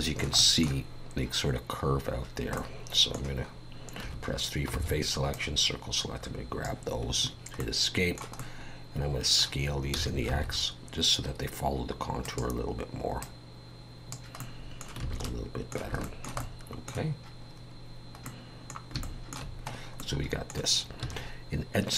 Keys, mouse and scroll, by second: 0.4 middle click, 2.6 middle click, 4.0 3, 4.7 c, 7.6 middle click, 8.4 middle click, 9.9 s, 13.2 click, 14.4 middle click, 15.0 alt+a, 15.2 middle click, 16.0 shift+middle click, 16.4 middle click, 18.3 middle click, 19.0 shift+middle click, 19.7 scroll up 2, 20.0 middle click, 21.0 2.